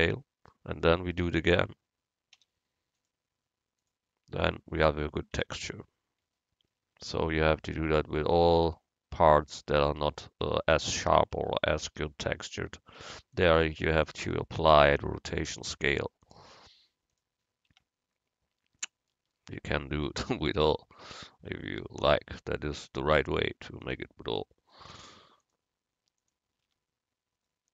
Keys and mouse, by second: 1.3 Tab, 2.4 u, 5.4 Tab, 10.1 Tab, 10.5 Tab, 11.4 Tab, 12.0 a, 12.2 a, 15.8 u, 17.8 Tab, 20.6 click, 20.9 right click, 21.2 Tab, 22.9-24.7 drag, 25.0 u, 26.8 Tab.